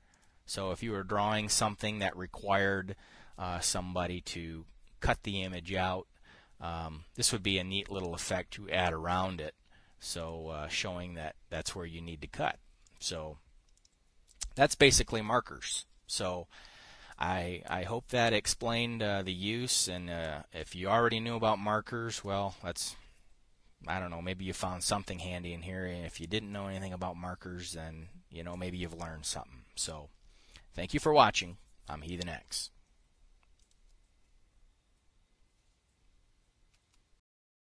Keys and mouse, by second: 0.3 click, 0.6 click, 10.7 click, 13.3 click, 14.2-15.9 drag, 16.2 click, 34.1 click.